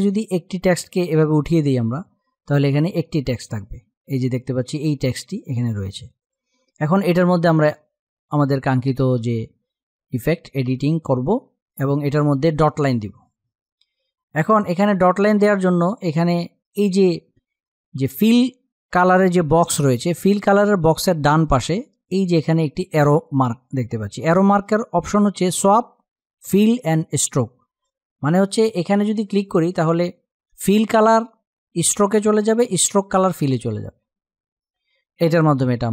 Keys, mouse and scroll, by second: 1.1 click, 4.9 click.